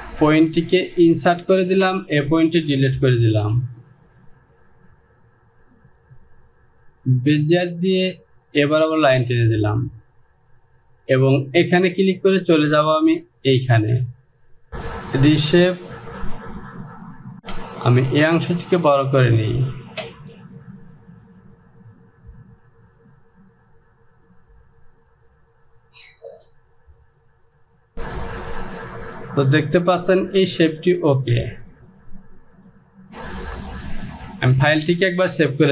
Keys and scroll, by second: 3.4 Delete, 17.5 Return, 33.0 Home.